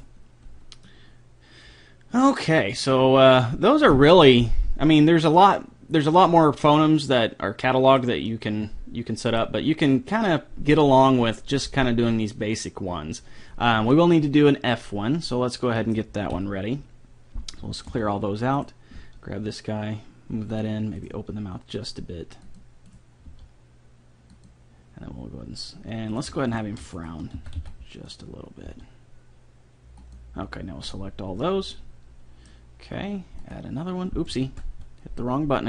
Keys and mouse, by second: 5.5-7.2 middle drag, 7.5 middle click, 8.3-9.5 middle drag, 9.6 middle click, 13.9 middle click, 14.8 click, 14.8 right click, 14.9 middle click, 15.8 middle click, 16.3 KP_3, 17.9 alt+g, 18.6-19.8 right drag, 19.0 g, 21.0-22.8 right drag, 21.2 g, 22.9-24.8 right drag, 23.2 g, 26.1-28.6 right drag, 27.4 a, 27.6 b, 28.6 g, 30.9-35.2 drag, 31.4-32.5 middle drag, 31.4-33.4 right drag, 34.4 ctrl+z.